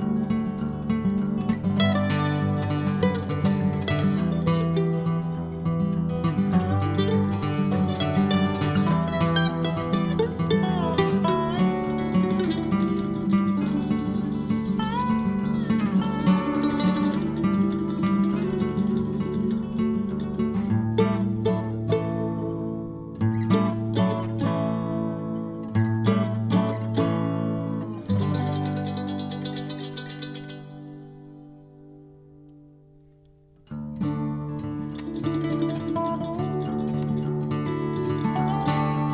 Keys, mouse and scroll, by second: 0.0 scroll up 1, 0.1-1.3 middle drag, 1.3 shift+click, 1.8 click, 3.1 click, 4.8-8.5 drag, 8.7 click, 9.1 click, 9.5-11.1 drag, 12.1 click, 13.4-14.9 drag, 16.6 click, 17.3-20.0 drag, 20.6 click, 21.3 click, 21.8-23.3 middle drag, 23.3 click, 24.1-24.4 scroll down 2, 24.4-25.9 middle drag, 26.5 click, 27.8 click, 28.4 click, 30.0-31.1 drag, 31.1 p, 32.1 l, 35.5 click, 35.8 click, 36.4 click, 36.8-38.3 drag, 38.4-39.1 drag.